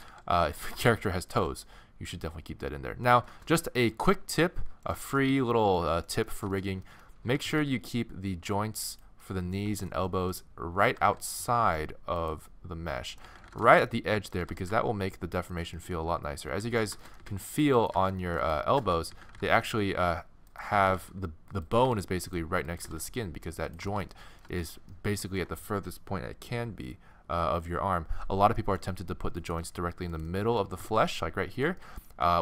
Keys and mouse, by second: 0.1 a, 0.5-1.6 middle drag, 0.6 g, 1.6 middle click, 5.6-7.3 middle drag, 7.3 g, 10.9 g, 13.2 z, 14.4 g, 16.1-17.6 typing, 17.8-19.5 right drag, 19.1 z, 19.7 z, 20.5 right click, 20.8 g, 21.4 click, 21.8 g, 22.8 g, 23.9 middle click, 29.4-30.9 middle drag, 30.7 g, 30.9-32.0 drag.